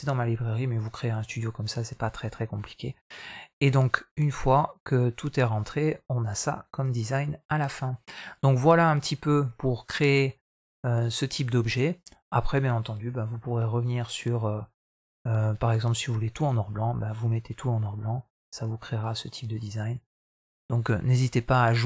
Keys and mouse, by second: 14.0-16.4 drag.